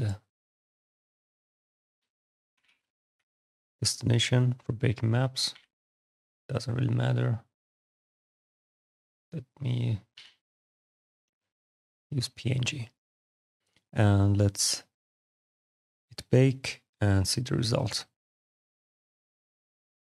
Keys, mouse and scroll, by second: 0.9 click, 2.3 m, 2.4 a, 2.9 p, 3.2 Return, 3.9 click, 5.0 click, 5.3 a, 5.7 click, 7.3 click, 8.3 click, 9.4 click, 9.9 a, 11.6 click, 15.5 click.